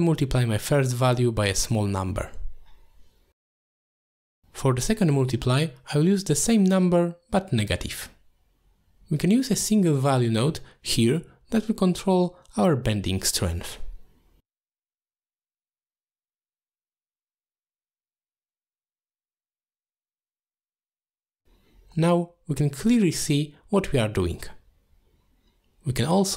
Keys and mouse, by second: 2.0 middle click, 2.2 shift+d, 2.9 middle click, 3.4-4.8 drag, 5.2 middle click, 5.6 shift+a, 8.9-9.3 drag, 9.8 click, 10.0 click, 10.6 middle click, 11.5 click, 11.7 click, 12.4 click, 13.0 click, 13.2 click, 14.1-15.0 drag, 15.5 middle click, 15.9-17.1 drag, 17.5 middle click, 18.0 middle click, 18.2 click, 19.6 click, 20.5 click, 21.7 middle click, 22.6-25.1 shift+drag, 25.8 middle click, 26.2 shift+a.